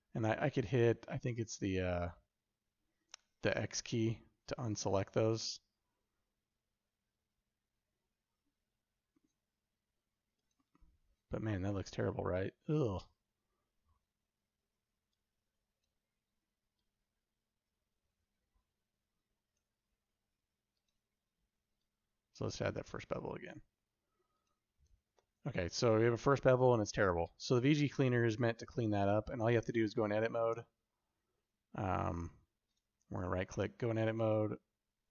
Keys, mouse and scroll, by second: 29.5 Tab, 30.5 Tab, 33.4 Tab, 34.4 alt+z.